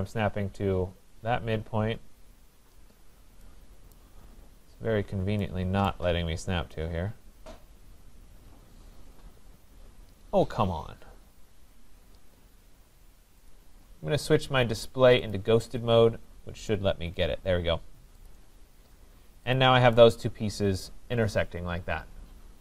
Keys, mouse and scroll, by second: 3.1 scroll down 1, 3.1 scroll down 1, 3.7 scroll, 4.0 right click, 4.3 scroll, 5.9 right click, 13.5 click, 15.3 click, 18.3 click, 18.9 scroll down 3, 19.5 click, 21.1 scroll.